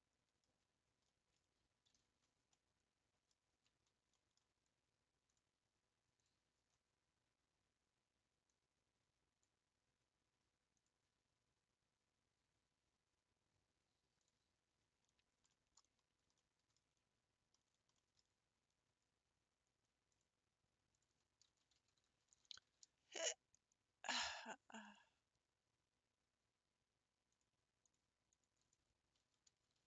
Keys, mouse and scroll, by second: 0.5 Tab, 0.8 scroll up 4, 1.1-2.1 middle drag, 2.1 ctrl+s, 2.5-3.5 middle drag, 3.5 Tab, 3.9 scroll up 2, 4.2-5.3 middle drag, 5.3-14.5 drag, 16.9-17.3 scroll down 3, 24.0 click, 24.4-28.0 drag.